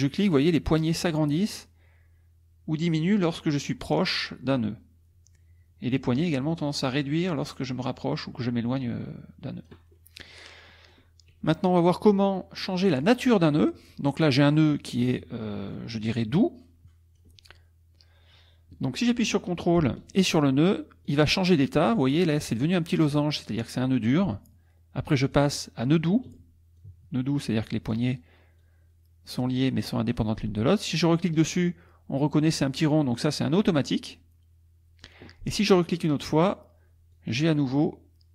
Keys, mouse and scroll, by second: 9.9 middle click, 10.7 middle click, 12.0 middle click, 13.0 click, 14.3 click, 15.7-17.4 drag, 21.0 ctrl+click, 25.3 ctrl+click, 26.8-28.1 ctrl+drag, 28.6-30.3 drag, 30.9 ctrl+click, 33.2-35.2 drag, 35.8 ctrl+click, 37.1-38.3 drag.